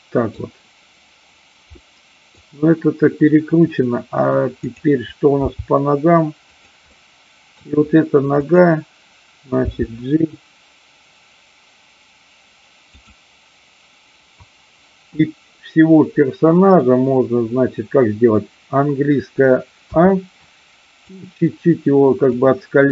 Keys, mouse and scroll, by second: 1.7-2.3 middle drag, 4.6 click, 5.6 g, 6.6 click, 6.9-7.5 middle drag, 8.3 click, 9.6 g, 13.0 click, 21.0-22.2 drag.